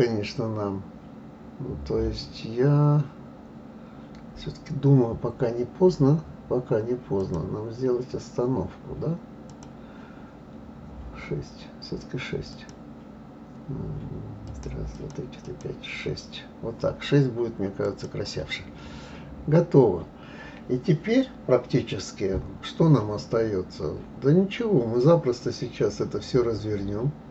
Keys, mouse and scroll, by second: 3.7-6.2 scroll up 2, 7.2 click, 9.5 click, 12.5-16.5 drag, 17.8 click, 22.3-25.4 scroll down 2.